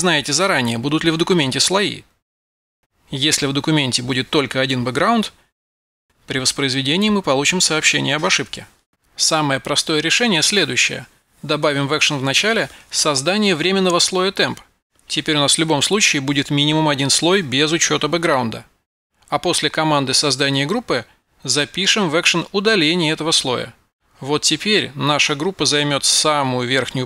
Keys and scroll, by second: 2.6 F12, 11.4-12.9 typing.